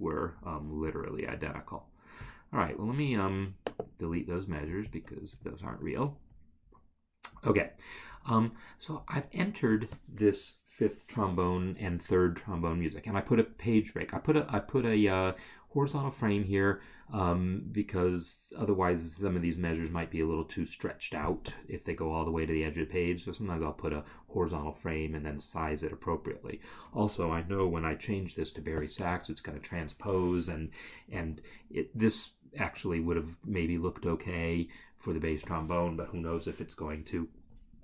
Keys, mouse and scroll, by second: 2.2 click, 4.9 shift+click, 5.6 ctrl+Delete.